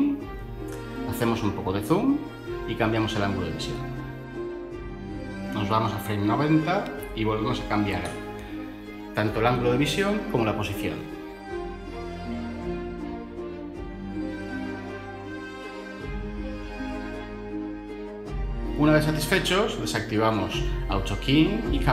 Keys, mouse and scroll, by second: 5.8 typing, 6.0 Return.